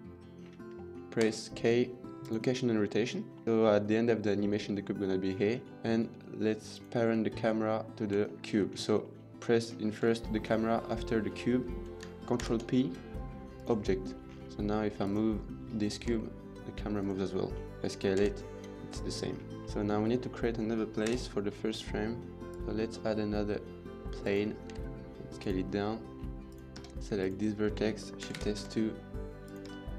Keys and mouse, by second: 0.6 middle click, 2.2 k, 3.2 middle click, 5.5 middle click, 8.1 shift+middle drag, 8.8 shift+middle drag, 9.3 shift+drag, 12.4 ctrl+p, 14.7 click, 16.1 g, 18.2 s, 19.4 middle drag, 19.8 middle drag, 20.8 KP_7, 22.4 click, 22.6 shift+a, 24.6 s, 25.5 middle click, 26.2 middle click, 26.3 click, 26.5 Tab, 28.2 shift+s, 28.5 Tab, 29.5 Tab.